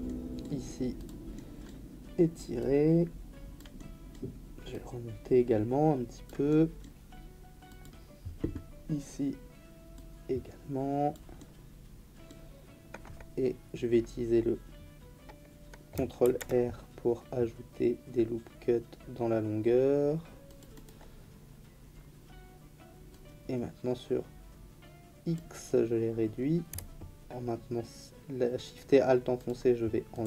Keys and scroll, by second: 16.2 ctrl+r.